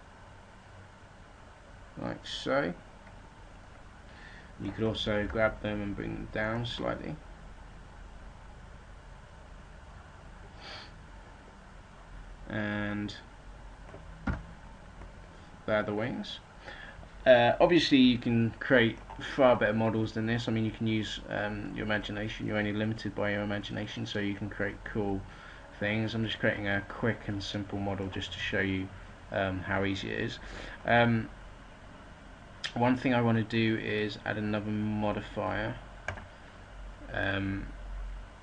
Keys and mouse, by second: 5.1 g, 6.4-8.6 drag, 14.2 a, 34.5-37.8 middle drag.